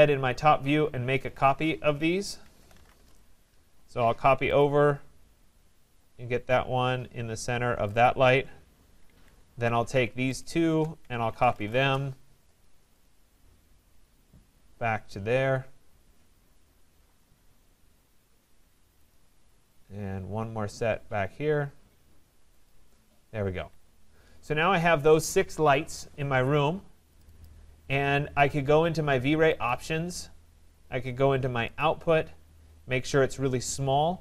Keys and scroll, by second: 2.9 Return, 9.0 Escape, 11.8 Return, 23.5 Escape.